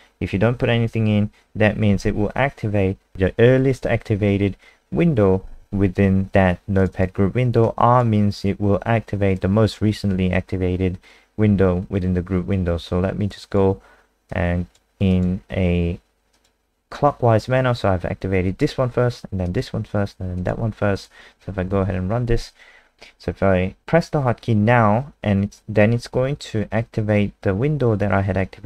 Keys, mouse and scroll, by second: 6.9 click, 7.6 click, 21.6 F5.